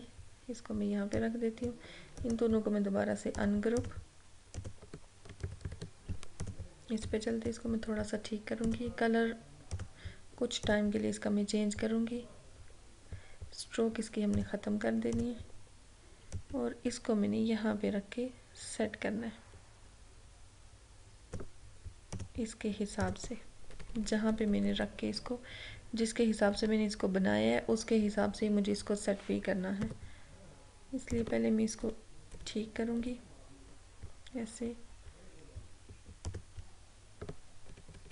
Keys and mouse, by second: 2.2 right click, 3.3 click, 5.4 ctrl+=, 6.4-8.6 drag, 14.4-22.2 drag, 23.8 Left, 24.4 Down, 25.2 Left, 29.9 a, 31.2 click, 31.9 Down, 36.4 click, 37.8 Up.